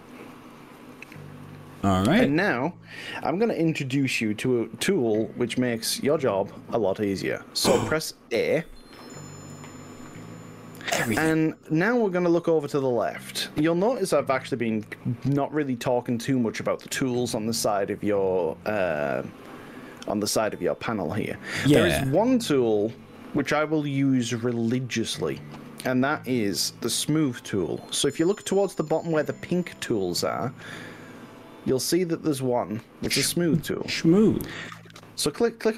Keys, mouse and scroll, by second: 0.1 click, 0.9-6.7 middle drag, 7.1-8.8 middle drag, 9.5 a, 14.1-18.7 middle drag.